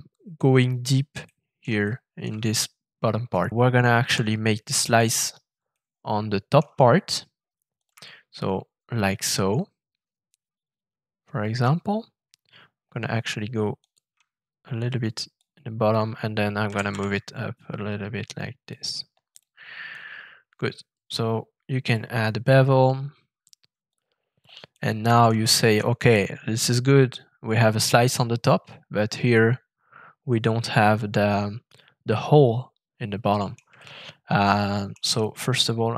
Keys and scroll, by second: 4.0 f, 16.6 g, 16.8 z.